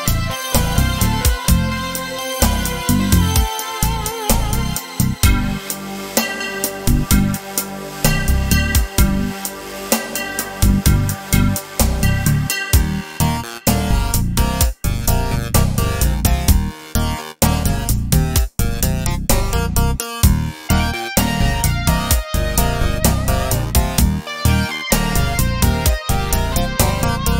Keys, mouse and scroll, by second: 5.8 click, 7.1 r, 13.9 click, 15.4 g, 19.1-27.3 drag.